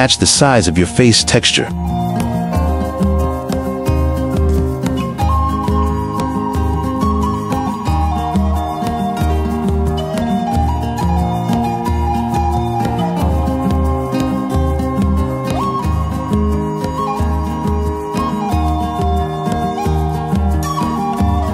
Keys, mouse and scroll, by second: 1.4 shift+middle click, 1.9 shift+middle click, 2.4 shift+middle click, 3.5 g, 4.0 click, 4.3 shift+click, 4.8 g, 4.9 g, 6.5 click, 7.1 g, 8.0 middle click, 8.3 a, 8.7 shift+middle click, 9.4 shift+click, 9.7 click, 10.4 click, 12.1 click, 12.7 click, 13.7 shift+middle click, 14.9 right click, 16.7 shift+right click, 18.1 middle click, 18.6 middle click, 19.0 right click, 20.8 click, 21.1 t.